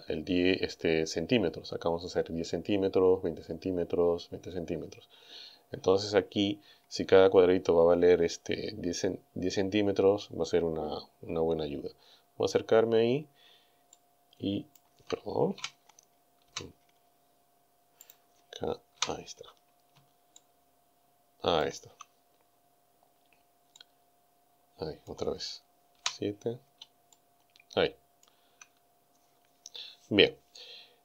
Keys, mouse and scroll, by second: 5.1-6.0 scroll down 3, 6.5 scroll down 2, 11.4 scroll up 2, 12.0 scroll up 2, 13.9 shift+middle click, 14.9 shift+scroll up 2, 15.6 KP_7, 16.5 KP_7, 18.1 middle click, 19.0 KP_7, 20.1 shift+scroll down 2, 20.2 shift+scroll up 2, 20.4-21.8 shift+drag, 22.4 scroll up 2, 23.8-25.3 drag, 26.0 KP_7, 27.1-28.3 shift+middle drag, 28.3 shift+scroll down 1.